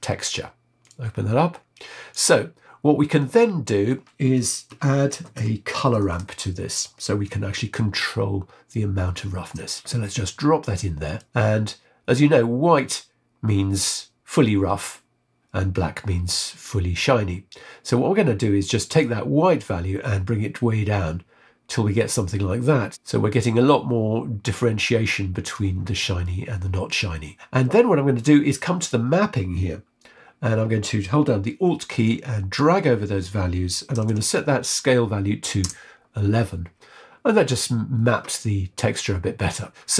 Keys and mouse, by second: 2.1 click, 5.1 shift+a, 18.9-22.9 drag, 23.2-25.5 drag, 26.3-27.4 shift+drag, 27.6 middle click, 27.6 click, 32.0-35.7 alt+drag, 34.0 KP_1.